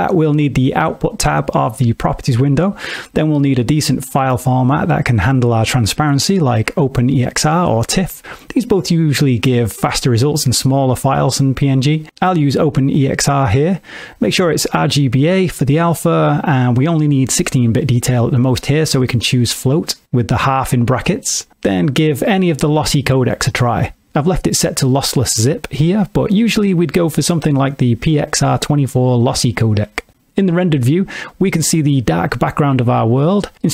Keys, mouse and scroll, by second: 1.6 click, 16.3 middle click, 17.7 click, 29.2 KP_0, 30.2 z, 32.8 alt+shift+z.